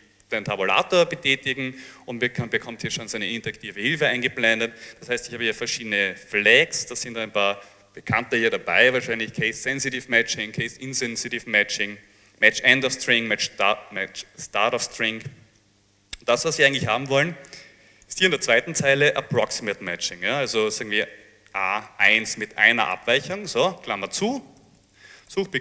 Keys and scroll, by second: 0.4 Tab, 21.1 a, 21.6 1, 23.0 shift+9, 24.3-25.6 typing.